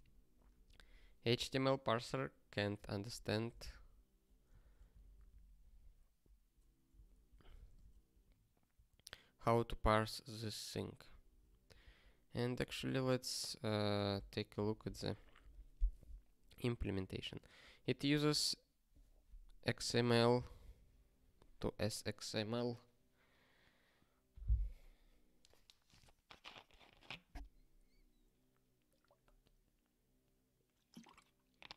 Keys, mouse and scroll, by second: 11.8 super+o, 12.7 super+b, 17.9 click.